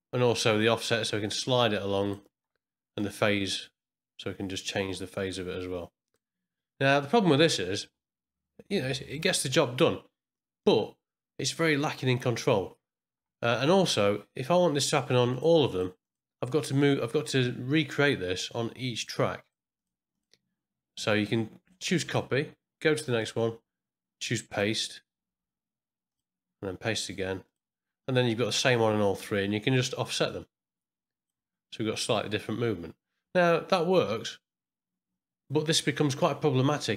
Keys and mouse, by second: 0.6-2.1 drag, 3.0-6.1 drag, 14.7 click, 15.3 click, 15.6 click, 16.0 click, 18.9 click, 19.4 click, 19.7 click, 20.1 click, 22.1 click, 23.2 click, 24.5 click, 26.1 click, 27.4 click, 30.1-31.4 drag.